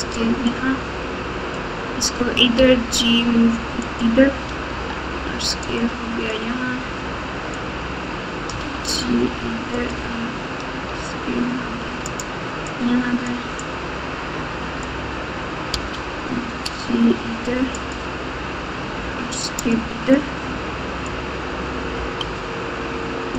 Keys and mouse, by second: 0.4 click, 0.8-2.0 drag, 2.5 g, 4.6 s, 6.5-7.5 drag, 8.5 g, 10.8 s, 12.8 click, 13.5-14.9 drag, 15.7 g, 18.9 s, 21.0 click, 22.8 g.